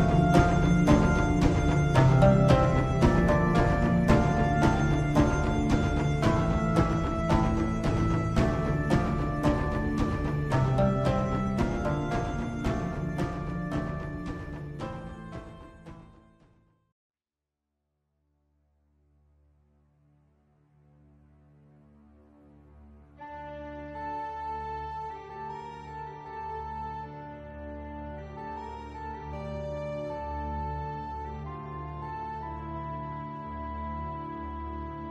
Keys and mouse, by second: 8.0 alt+click, 9.9 alt+click, 11.1 alt+shift+click, 12.9 r, 16.6 ctrl+z, 17.7 g, 23.2 shift+click, 24.5 shift+click, 26.2 shift+click, 27.7 shift+click, 29.6 ctrl+click, 31.7 r, 35.0 g.